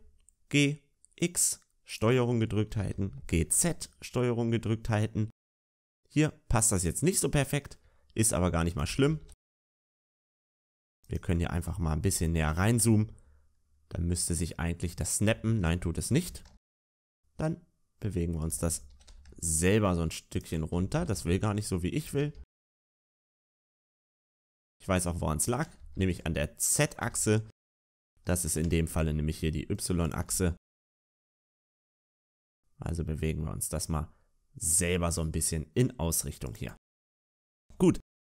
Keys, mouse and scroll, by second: 2.7 g, 9.1 g, 12.3 shift+middle click, 12.3 scroll up 3, 12.3 g, 16.0-17.0 scroll up 1, 18.9 g, 23.4 g, 28.5 ctrl+z, 28.5 scroll down 4, 28.5 g, 30.7-32.3 scroll up 4.